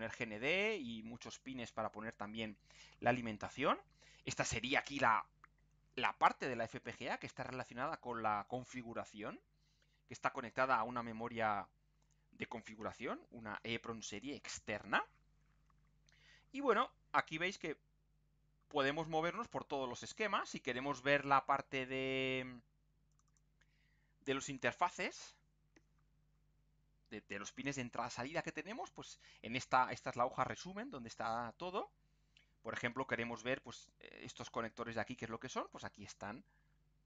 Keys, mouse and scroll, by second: 2.8-3.2 scroll down 2, 3.7-4.1 scroll up 2, 6.3 scroll down 2, 6.8 scroll up 2, 16.5-17.3 scroll down 4, 17.8 scroll up 2, 18.3-19.4 scroll down 6, 19.6-20.0 scroll up 4, 20.4 click, 23.1 click, 26.5-27.2 scroll up 2, 28.6-28.9 scroll down 2, 29.5 scroll down 2, 30.3 scroll up 2, 31.1 scroll up 2, 32.1 scroll up 2, 32.8 scroll up 2, 35.2 scroll down 2, 36.0-36.4 scroll up 2, 36.6-37.0 scroll down 4.